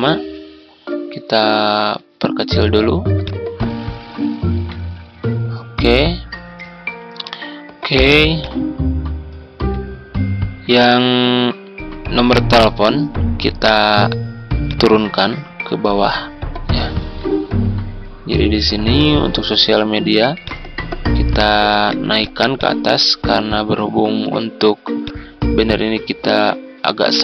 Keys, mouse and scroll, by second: 4.2 ctrl+click, 5.3 click, 7.0 Tab, 8.4 click, 12.5 click, 17.0 ctrl+g, 17.6-20.1 drag, 20.2 click, 21.7 ctrl+z, 22.1-27.2 drag.